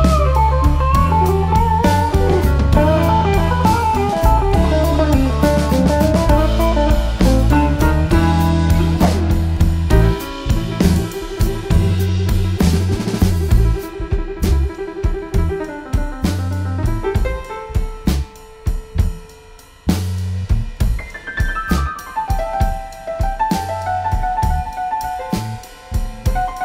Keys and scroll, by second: 0.7 typing, 2.0 typing, 2.9 shift+F6, 6.4 F1, 7.9 Page_Down, 8.8-10.0 typing, 15.0-15.6 typing, 16.4 F7, 19.6 F1, 20.2 -, 21.3-22.0 typing, 24.7 ctrl+z.